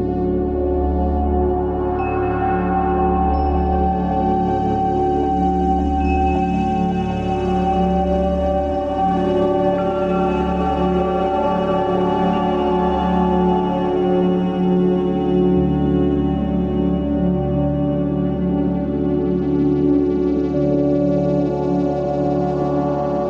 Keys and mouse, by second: 1.2 g, 10.4 middle drag, 11.5 middle click, 12.2-12.6 shift+middle drag, 17.7 middle click, 19.6 click, 22.2 click.